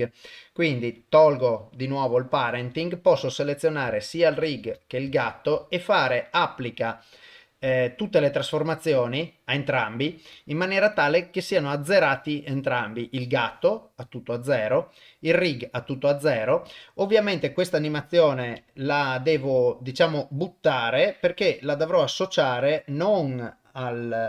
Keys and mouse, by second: 1.0 click, 3.0 click, 4.4 shift+click, 5.0 ctrl+a, 10.3 click, 11.0 click, 11.6 click, 14.7 click, 16.7 click, 18.5 click, 19.3 a, 20.9 click, 23.8 click.